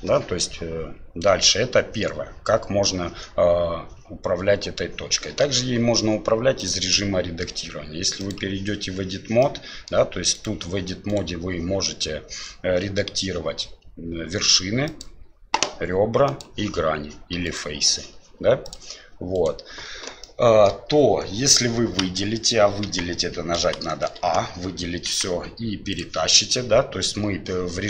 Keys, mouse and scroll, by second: 6.7-8.4 drag, 9.4 middle click, 10.3 right click, 11.1 right click, 14.9 click, 16.3 click, 17.4 right click, 18.6 click, 19.3 right click, 20.2 middle click, 22.0 a, 22.8 KP_1, 23.8 shift+middle click, 25.1 g.